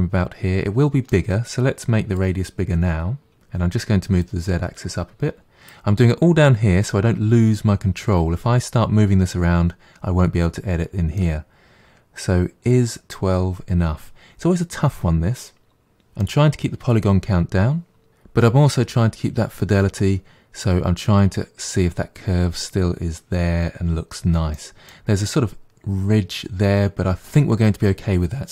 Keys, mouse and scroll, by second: 2.2-3.3 drag, 4.2-7.2 drag, 11.2-14.2 middle drag, 24.6-27.2 middle drag.